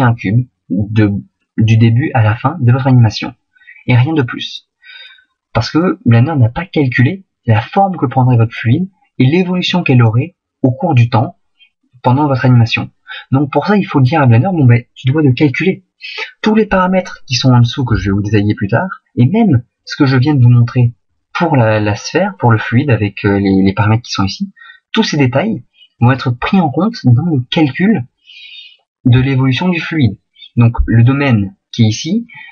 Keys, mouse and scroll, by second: 20.3 right click, 26.0 right click.